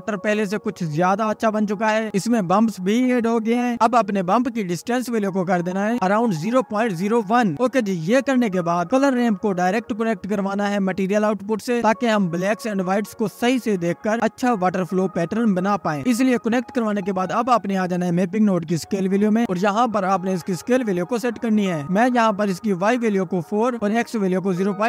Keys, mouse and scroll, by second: 5.1 scroll up 7, 5.2-7.8 drag, 9.2-9.7 scroll down 2, 9.7-10.0 scroll up 2, 10.0-10.9 middle drag, 10.9-12.4 drag, 12.9 scroll up 2, 13.2-14.5 middle drag, 14.5-14.9 scroll up 9, 14.9 drag, 15.2 middle click, 15.4-15.9 scroll up 1, 15.9 click, 16.3 scroll down 1, 16.4-18.0 middle drag, 18.0-21.0 drag, 22.3-22.7 drag, 22.7-23.3 scroll down 1, 23.3-23.7 scroll down 1, 24.1-24.8 middle drag.